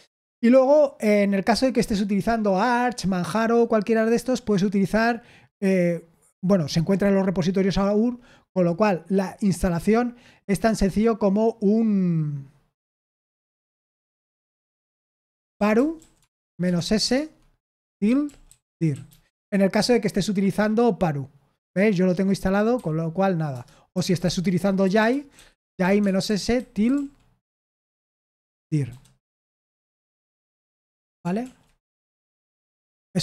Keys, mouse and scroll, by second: 15.3-19.5 typing, 23.6-29.3 typing, 31.4 ctrl+l, 31.4-33.1 typing, 32.9 Return.